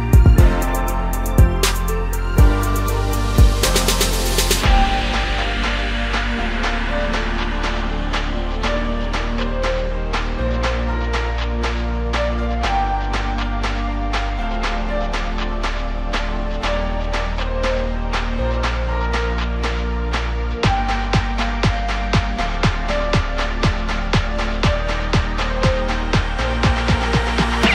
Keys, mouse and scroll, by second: 0.4 click, 0.9 scroll down 1, 1.1-1.5 middle drag, 1.5 scroll down 3, 1.7-4.0 middle drag, 4.0 scroll up 1, 4.2-5.9 middle drag, 5.9 click, 6.8-8.5 middle drag, 8.5 click, 8.8-9.7 scroll up 2, 9.7 click, 10.0-10.3 scroll up 1, 10.3 Tab, 11.3-12.6 scroll down 2, 12.6 ctrl+r, 15.7 Tab, 15.9 scroll down 2, 16.1-17.9 middle drag, 17.9 KP_3, 18.7-19.2 scroll down 1, 19.2-19.8 ctrl+KP_8, 20.5 scroll up 1, 20.7 scroll down 1, 20.9-25.8 middle drag, 25.8 click, 27.1-27.7 drag.